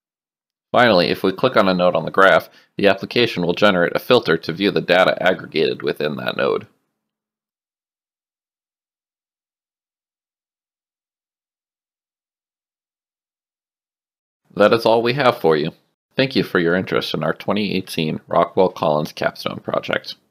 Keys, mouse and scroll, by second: 1.7 click, 3.9 click, 7.3 click, 10.2 click.